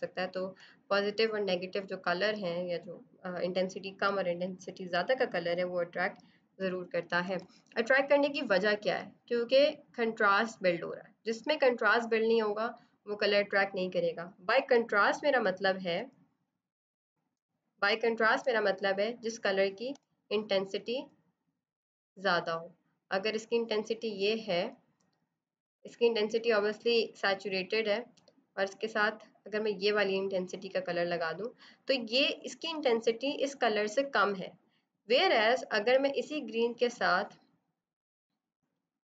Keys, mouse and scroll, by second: 0.2 space, 7.1 ctrl+0, 14.4 z, 14.9 click, 15.8 space, 16.0 click, 16.4 space, 16.8 click, 16.9 space, 18.0 click, 19.8 b, 20.7 right click, 21.4 click, 27.8 click, 35.7 click.